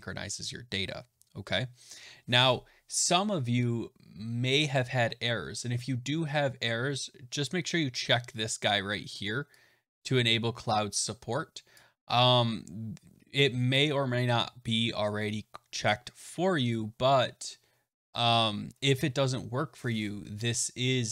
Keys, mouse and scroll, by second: 11.6 click.